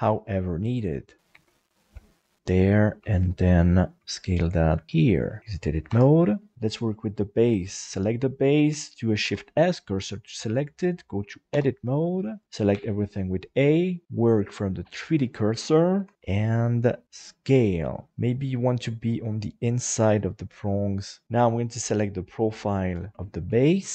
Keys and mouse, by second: 1.3 g, 2.8 right click, 3.0 shift+right click, 3.6 shift+right click, 3.9 shift+right click, 5.2 middle click, 5.9 Tab, 6.3 middle click, 7.0 middle click, 9.2 shift+s, 11.5 Tab, 12.7 a, 14.0-15.0 drag, 15.9 KP_7, 16.1 s, 17.5 click, 17.9 middle click, 18.2 s, 21.2 Tab, 21.7 right click, 22.5 KP_1, 23.1 g, 23.5 shift+middle click.